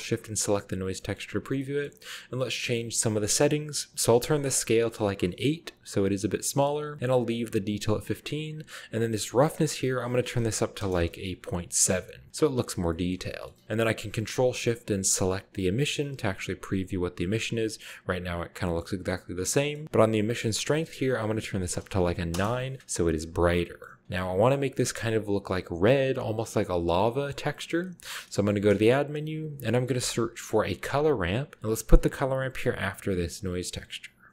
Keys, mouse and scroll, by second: 1.1-2.5 scroll up 3, 1.1-1.6 middle drag, 4.9 8, 5.7 click, 9.2 click, 10.6 BackSpace, 10.7 7, 10.8 Return, 11.9-12.3 scroll up 1, 12.3-13.6 scroll down 2, 13.1 middle click, 15.1-15.7 drag, 18.6 middle click, 19.6-20.1 middle drag, 19.8-20.7 scroll up 1, 20.7 click, 21.5 9, 22.3 Return, 23.6-24.0 middle drag, 27.1-28.3 middle drag, 28.5 shift+a, 29.0 shift+click, 29.9-30.4 typing, 32.0 click, 33.2 click, 33.6 click.